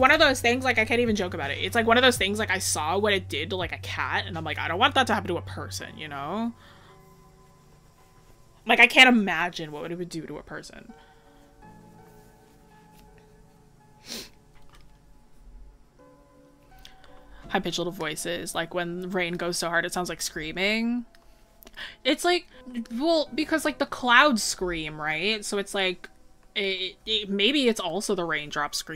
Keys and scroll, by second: 17.3-17.7 scroll up 1.